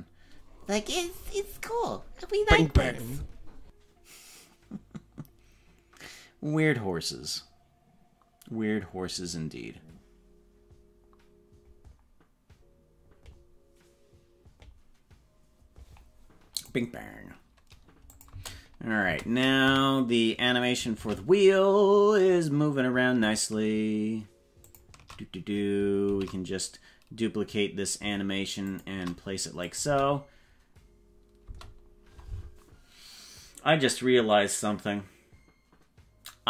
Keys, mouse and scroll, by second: 18.0 click, 18.3 space, 19.0 space, 19.6 a, 20.9 shift+d, 26.0 shift+d, 29.6 click, 29.8 space, 31.4 space.